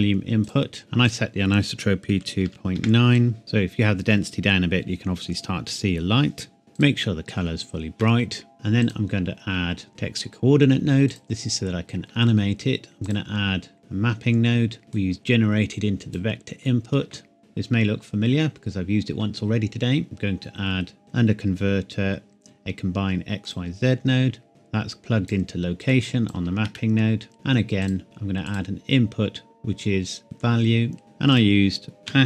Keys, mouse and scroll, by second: 1.0 click, 2.2 KP_Decimal, 2.5 KP_9, 2.8 KP_Enter, 3.4 click, 6.8 click, 8.1 shift+middle click, 8.8 click, 15.2 click, 23.4 click, 24.6 click, 26.8 shift+middle click, 27.3-27.8 scroll up 2, 27.8 click.